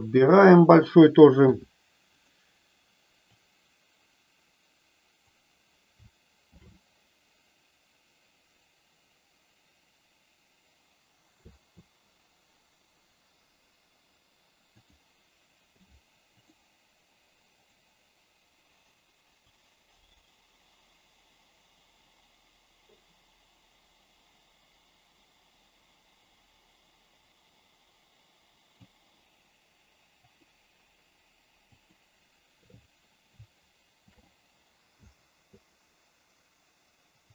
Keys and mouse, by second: 1.5 i, 3.4-5.4 drag, 6.5 shift+f, 11.4 Left, 15.6 i, 17.6 click, 19.5-28.8 drag, 30.4 click, 31.7 click, 34.0 shift+f, 35.0 Down.